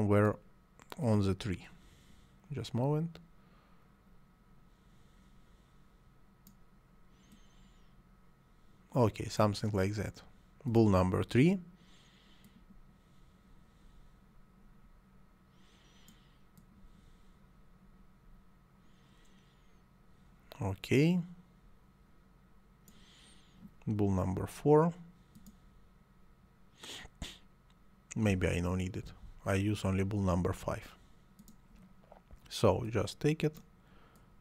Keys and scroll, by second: 29.0 Delete.